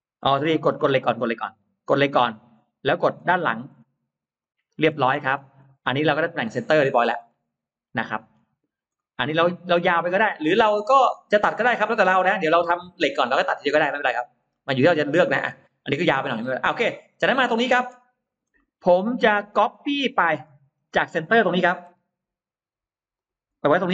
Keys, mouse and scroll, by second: 0.1-1.2 scroll down 6, 1.9 click, 2.8-3.9 scroll up 4, 4.3 click, 4.7-5.4 scroll down 2, 5.5 middle click, 5.9-6.6 scroll down 2, 6.8 scroll up 2, 7.1 middle click, 8.2 scroll down 2, 8.7-9.1 scroll up 2, 8.9 middle click, 9.1-10.1 scroll down 2, 10.1-10.7 scroll up 4, 11.7-12.0 scroll up 2, 12.3-13.4 scroll down 4, 13.7-14.8 scroll down 5, 14.3 middle click, 16.4 click, 17.5 scroll down 1, 17.7 space, 17.8 click, 18.4 middle click, 18.8-19.1 scroll down 1, 19.5 scroll down 1, 19.6 middle click, 20.7-21.4 scroll up 2, 21.7 m, 23.0 click, 23.3 middle click.